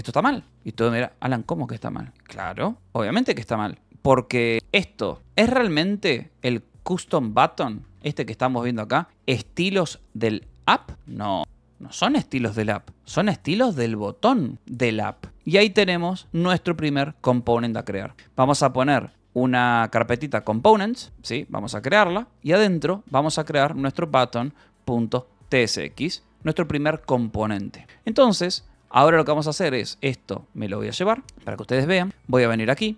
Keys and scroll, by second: 1.2 Escape, 3.8-6.3 typing, 7.1 Return, 7.8 k, 8.6 j, 10.9 Escape, 11.3 shift+;, 11.8 j, 12.0 Return, 13.0 j, 13.5 j, 14.2 j, 15.3 Escape, 15.5 shift+;, 16.9-19.1 typing, 21.0 Escape, 21.2 y, 22.1 Return, 22.7-26.1 typing, 25.8 Return, 27.4 shift+;, 28.7 j, 29.3 Return, 29.7-31.2 typing, 31.9 Return.